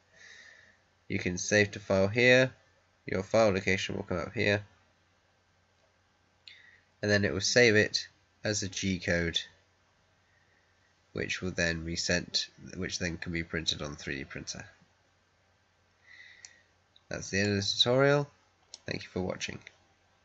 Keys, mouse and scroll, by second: 16.3-18.6 middle drag, 18.6-20.2 right drag.